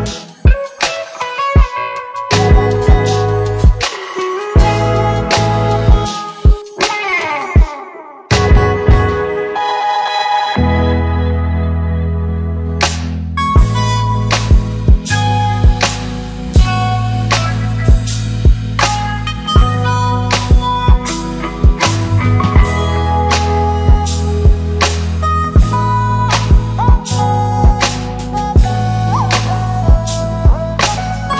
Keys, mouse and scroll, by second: 0.8 click, 6.8-8.6 scroll down 1, 9.5 click, 10.3 ctrl+d, 16.1 click, 22.6 click, 24.7 click, 25.2 shift+click, 26.4 ctrl+d, 27.5-29.7 click, 30.8 shift+Down.